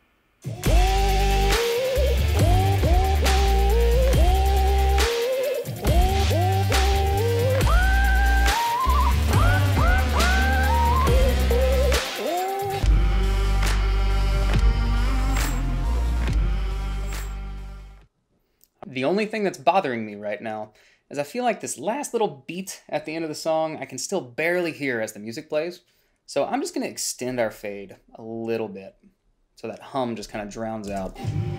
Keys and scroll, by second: 31.2 space.